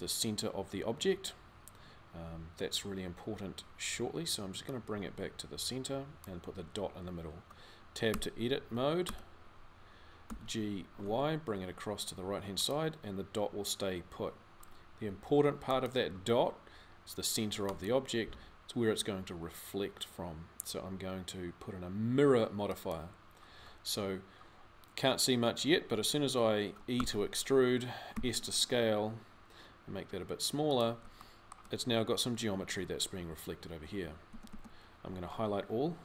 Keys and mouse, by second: 7.9 Tab, 8.8 Tab, 10.0 g, 34.1 a, 34.3 a.